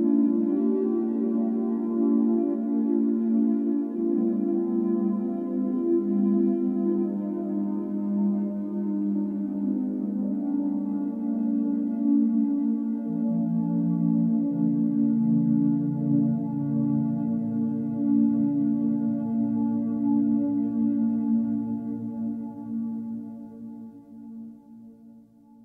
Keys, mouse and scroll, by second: 0.8-1.1 scroll up 4, 1.1 click, 1.8 alt+middle click, 2.0 alt+middle drag, 2.3 scroll up 3, 2.5 shift+d, 2.9 r, 3.9 o, 5.0 r, 6.5 s, 9.2 click, 9.8 shift+click, 10.1 s, 11.0 g, 11.5 Tab, 11.7 a, 12.5 alt+s, 14.7-15.2 scroll up 2, 15.2 shift+middle click, 15.5-15.9 scroll up 2, 17.2 alt+s, 18.8-20.2 drag, 20.2 s, 22.5 Tab, 22.8-23.5 scroll down 4, 23.5 click, 23.7-24.0 scroll down 4, 24.0-24.6 scroll up 6, 24.6 click, 24.9-25.4 scroll up 2, 25.1 Tab.